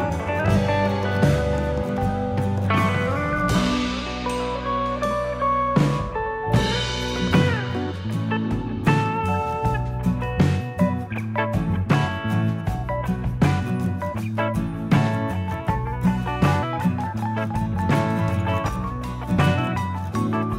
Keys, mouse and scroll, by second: 0.7 shift+middle click, 1.5 scroll up 1, 2.4 click, 4.8 ctrl+click, 6.6 ctrl+e, 10.4 click, 10.8 g, 12.4 click, 15.2 click, 15.7 click, 18.2 click, 19.2 click, 19.6 click, 20.3 click.